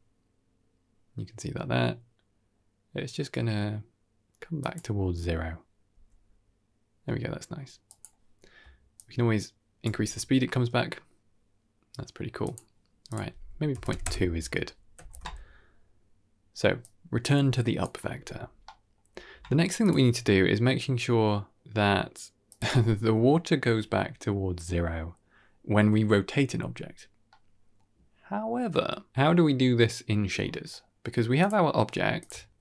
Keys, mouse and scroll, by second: 5.8 g, 8.8 shift+click, 10.3 g, 13.0 click, 14.8 ctrl+s, 16.7-17.7 drag, 18.3 scroll down 2, 18.5-18.8 middle drag, 19.7 click, 20.0 r, 27.2-27.6 middle drag, 30.3 scroll up 3, 30.6-30.9 middle drag, 31.3 click, 31.5 middle click, 31.8 g, 32.5 ctrl+shift+click.